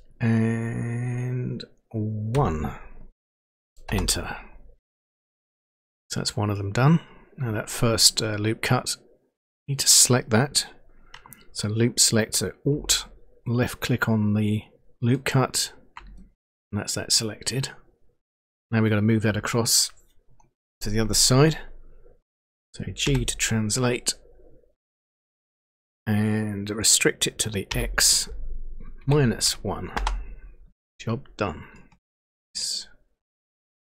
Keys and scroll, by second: 2.5 1, 3.9 Return, 23.1 g, 27.7 x, 29.0-29.9 typing.